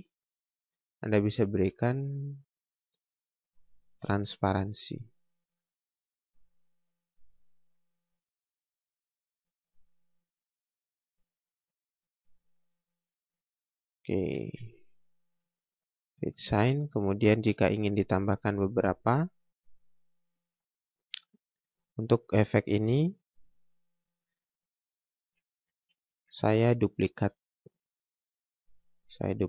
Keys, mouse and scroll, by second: 0.5 ctrl+z, 4.7 click, 14.4 space, 14.6 click, 15.0 scroll down 1, 17.3-17.7 scroll up 1, 18.4 scroll down 1, 18.6 scroll up 1, 19.3 scroll down 1, 20.3 scroll up 1, 21.0 click, 23.6 scroll down 1, 23.9 scroll up 1, 24.7 click.